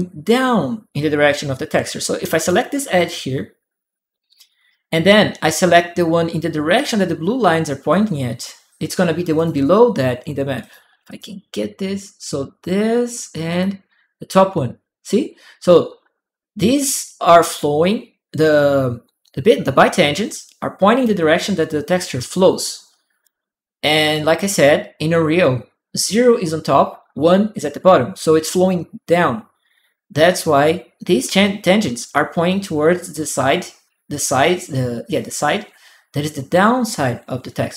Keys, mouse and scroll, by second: 2.2 click, 2.7 click, 9.1 click, 10.4 click, 10.8 click, 13.3 click, 22.4 click.